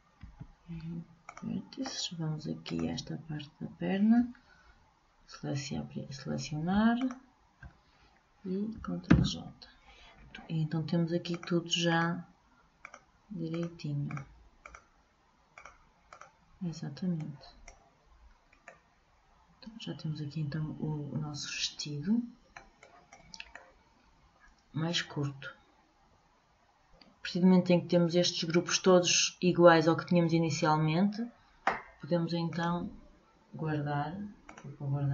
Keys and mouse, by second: 0.5 Delete, 2.8-4.6 drag, 7.1-8.9 drag, 9.2 ctrl+j, 11.5-18.3 drag, 17.4 middle click, 17.4 right click, 18.3 right click, 19.1-20.5 middle drag, 23.0-24.7 right drag, 24.7 middle click, 32.7-34.5 drag.